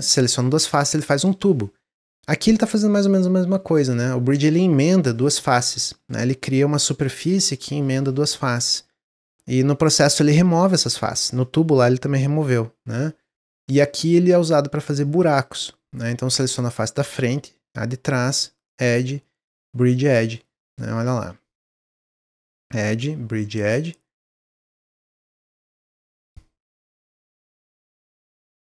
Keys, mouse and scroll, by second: 2.5 click, 3.0 middle click, 3.9 shift+click, 14.1-18.5 middle drag, 18.5-20.2 drag, 20.2 middle click, 20.6 click, 20.9 middle click, 21.6 shift+click, 22.4-24.6 drag, 24.8 middle click, 25.3 shift+click, 26.2-27.6 drag, 27.7-28.7 middle drag.